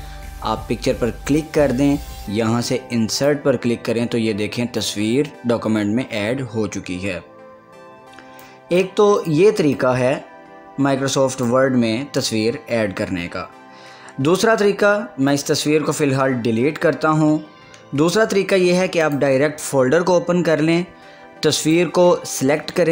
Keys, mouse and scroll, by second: 1.5 click, 5.3 scroll down 1, 6.1 scroll up 1, 6.2 scroll down 1, 8.6-12.5 drag, 12.4 scroll up 1, 13.8 scroll down 1, 13.8 scroll up 1, 14.0 scroll down 1, 15.5 click, 19.2 click, 19.3 click, 21.8 click.